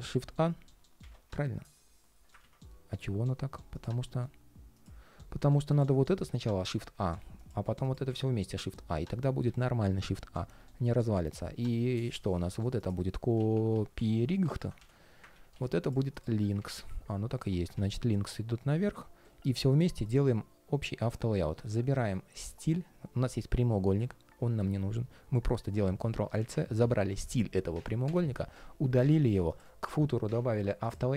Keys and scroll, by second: 2.1 super+z, 15.3 super+c, 16.3 super+r, 18.5 super+], 25.8 alt+super+c.